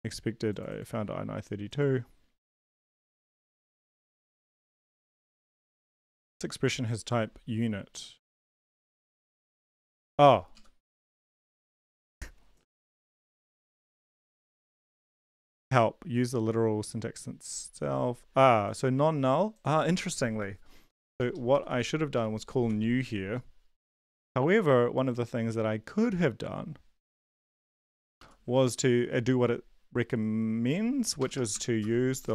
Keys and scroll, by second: 10.5 Down, 10.8 BackSpace, 11.0 ctrl+s, 13.2 ctrl+l, 13.4 Up, 13.6 Return, 20.9-22.3 typing, 22.6 ctrl+s, 28.5 Left, 31.2-32.2 typing.